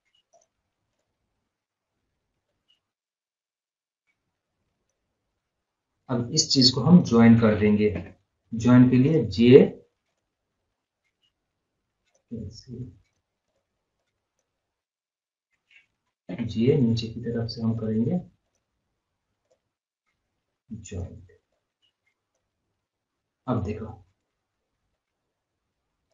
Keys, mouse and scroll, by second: 0.4 right click, 1.0-5.6 drag, 5.6 scroll up 1, 5.7 scroll down 1, 6.8 scroll up 1, 7.1 scroll down 1, 8.0 j, 9.1 click, 12.5 scroll down 1, 13.1 right click, 13.5-16.4 drag, 16.4 j, 17.7 click, 20.5 right click, 21.0 click, 22.8 scroll up 1, 23.5-23.9 scroll up 1, 24.0 scroll, 24.3-24.9 scroll down 1, 24.9-26.1 drag.